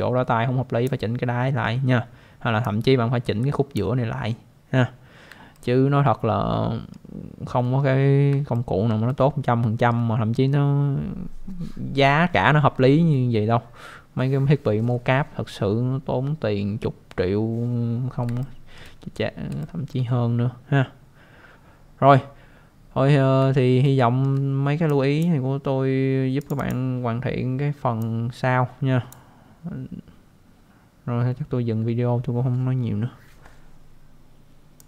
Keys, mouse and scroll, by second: 2.6 click, 5.5 alt+middle click, 8.5 alt+middle click, 9.0 alt+middle click, 18.4 alt+middle click, 19.6 alt+middle click, 23.8 alt+middle click, 24.9 click, 26.4 click, 26.6 click, 26.6 double click.